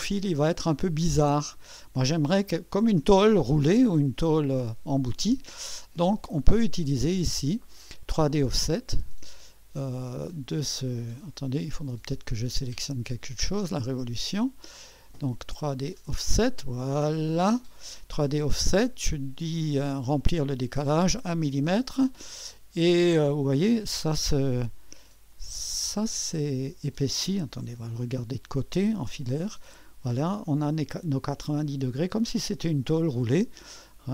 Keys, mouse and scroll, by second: 0.0-1.0 scroll up 2, 7.2 click, 7.5 click, 8.4 click, 10.6 click, 11.8 click, 13.1 click, 14.8 click, 15.6 click, 16.8-18.2 drag, 20.3 click, 25.3 click, 26.2-26.6 scroll up 1, 26.6-27.6 scroll down 2, 27.6 1, 28.1-30.8 right drag, 29.2 1, 31.5-32.6 scroll up 1, 31.5 typing, 32.6-33.0 scroll up 1, 33.2-34.1 right drag.